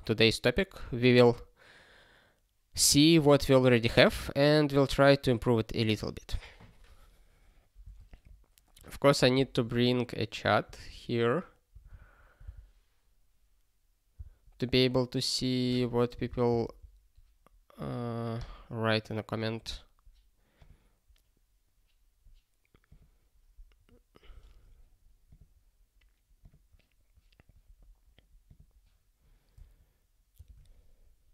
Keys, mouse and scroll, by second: 13.3 Return.